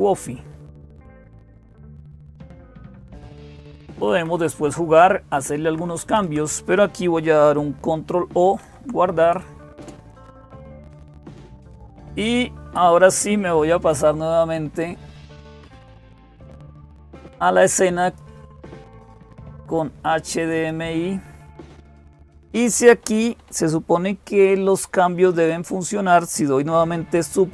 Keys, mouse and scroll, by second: 0.0-27.5 typing, 0.2-1.3 Down, 1.7 Down, 2.1-3.8 Down, 4.0 Down, 4.4 Down, 5.5 Down, 5.7 Down, 5.9 Down, 6.1 Down, 8.4 ctrl+o, 9.6 Return, 15.1 click, 17.8 click.